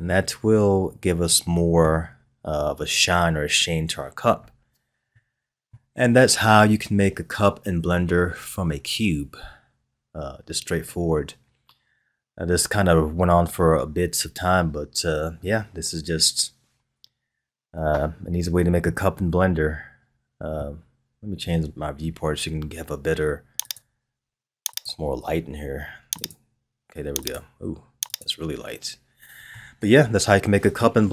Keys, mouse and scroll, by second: 2.2-5.0 scroll down 1, 5.0 scroll down 1, 5.1-8.2 middle drag, 18.8-21.9 middle drag, 23.6 click, 24.7 click, 29.5-31.1 middle drag.